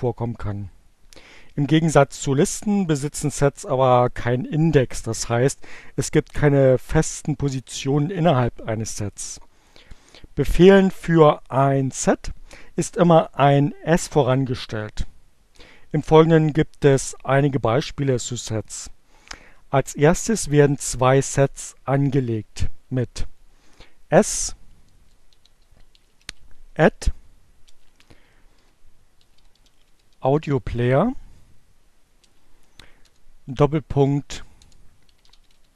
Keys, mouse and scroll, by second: 23.4 shift+a, 23.8 shift+BackSpace, 24.0 shift+s, 25.1-26.5 typing, 28.0-31.4 typing, 32.8-35.7 typing.